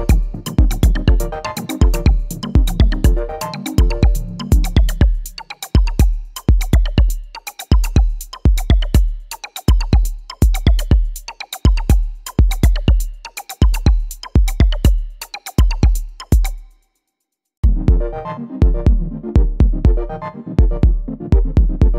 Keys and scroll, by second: 15.1 ctrl+r, 21.6 ctrl+r.